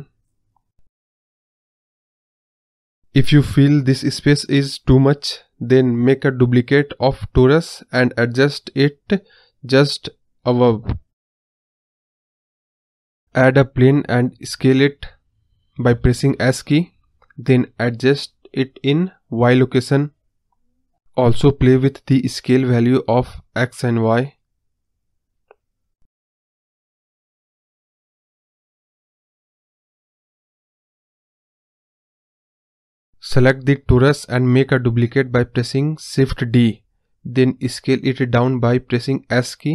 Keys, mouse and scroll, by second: 2.9 scroll down 1, 3.0-4.1 scroll up 1, 4.9 scroll down 2, 4.9 middle drag, 5.1 middle drag, 5.2-6.0 scroll up 1, 6.0 shift+d, 9.2-9.9 middle drag, 9.9-10.9 drag, 10.9 KP_0, 11.6 click, 13.1 scroll up 1, 13.4 shift+a, 14.6-15.8 scroll down 2, 16.3 s, 19.2-20.2 drag, 21.6-22.6 drag, 24.9-26.0 drag, 29.8-30.1 scroll down 1, 30.1 scroll up 1, 30.2 scroll down 4, 30.5-31.0 scroll up 5, 31.0 ctrl+z, 31.2-32.8 drag, 34.2 click, 36.4 shift+d.